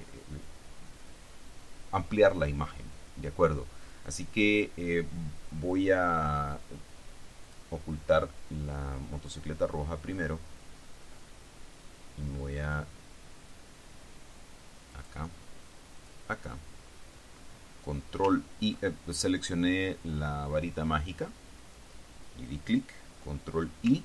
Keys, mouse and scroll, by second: 7.6 click, 15.1 click, 16.1 click.